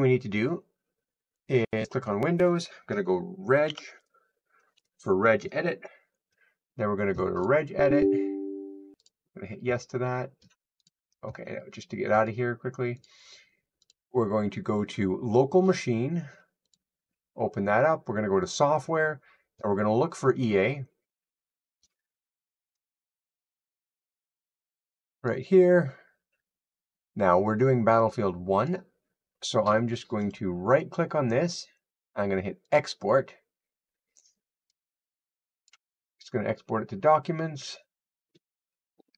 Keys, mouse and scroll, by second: 1.7 click, 7.0-9.5 typing, 7.3 click, 9.0 click.